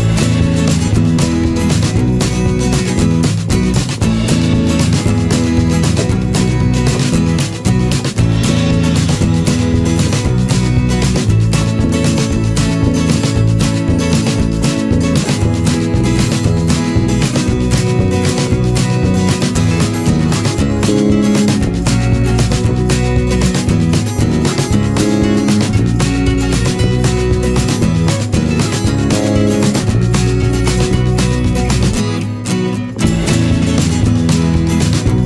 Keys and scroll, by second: 10.3 ctrl+-, 11.6 ctrl+z, 14.2 ctrl+=, 16.8 ctrl+z, 26.3 Return, 27.8 ctrl+=.